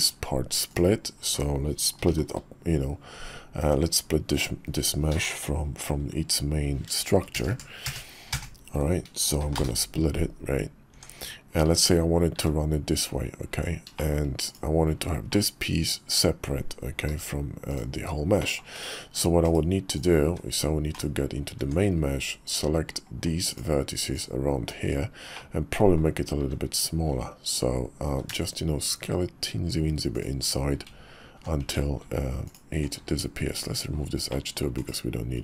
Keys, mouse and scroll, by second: 0.7 click, 2.0 ctrl+l, 3.6 Tab, 7.3 ctrl+KP_Add, 7.5 ctrl+KP_Add, 7.8 ctrl+KP_Add, 8.3 ctrl+KP_Add, 9.4 p, 10.9 Tab, 11.6 `, 12.3 `, 13.1 KP_5, 14.0 shift+click, 14.4 click, 15.3-16.4 middle drag, 17.1 g, 18.4 middle click, 18.8 /, 19.4 /, 19.9 click, 20.2 `, 20.9 /, 21.6 Tab, 23.5 alt+click, 25.3 middle click, 26.4 `, 28.1 s, 31.6 Tab, 32.4 alt+click, 32.9 x, 34.3 click, 34.7 /.